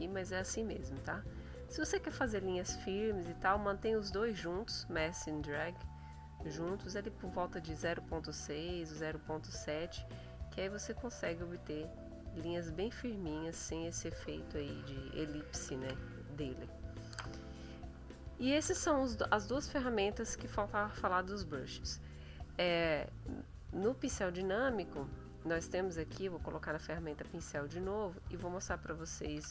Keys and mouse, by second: 0.9-1.6 drag, 1.8-2.6 drag, 2.6 click, 5.4-6.0 drag, 6.0 click, 7.4 click, 8.6 click, 9.4 click, 10.2 click, 11.5 click, 12.6-13.8 drag, 15.1 ctrl+z, 26.0 click, 29.4 F5.